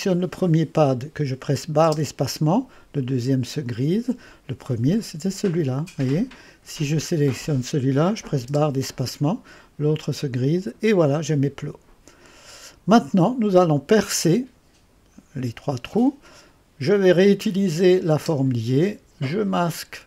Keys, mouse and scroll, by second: 0.2 click, 0.5 click, 1.9 space, 6.8 click, 8.5 space, 12.6 click, 17.8 click, 18.4 space, 19.3 click.